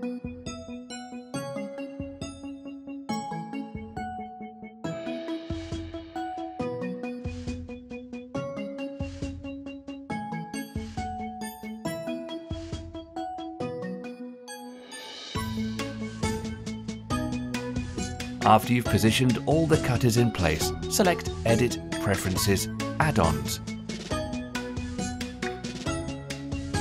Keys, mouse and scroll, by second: 0.7 scroll down 1, 1.0-1.5 shift+middle drag, 1.5 r, 2.2 g, 7.5 scroll down 1, 7.8-11.1 middle drag, 11.1 g, 12.7 r, 13.6-15.9 middle drag, 15.9-16.3 scroll down 2, 16.3-16.9 middle drag, 16.9 drag, 18.7 Delete, 19.2-19.7 scroll up 4, 19.7-20.5 middle drag, 20.5 drag, 20.8-23.9 shift+middle drag, 23.9 click, 25.1 click.